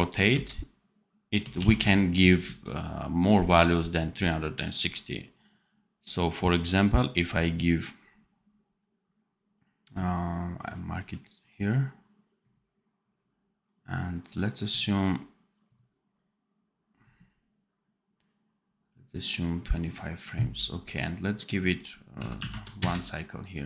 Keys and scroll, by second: 1.5 ctrl+z.